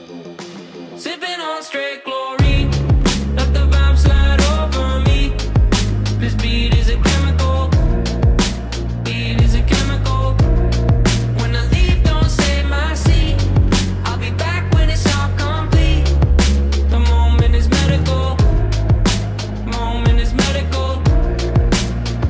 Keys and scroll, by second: 0.4 e, 1.1 w, 3.8 w, 6.7 e, 7.1 w, 10.3 w, 11.3 e, 12.1 w, 15.5 ctrl+1, 18.8 e, 20.3 w, 21.7 w.